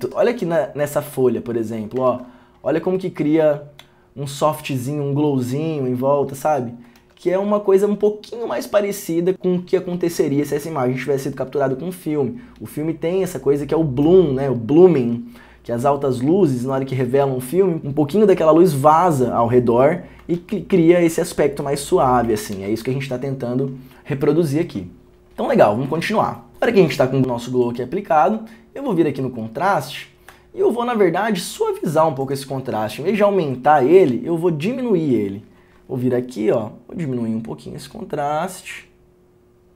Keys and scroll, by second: 0.1 ctrl+d, 2.2 ctrl+d, 7.1 ctrl+d, 20.5 ctrl+d, 22.7 ctrl+d, 22.9 ctrl+d.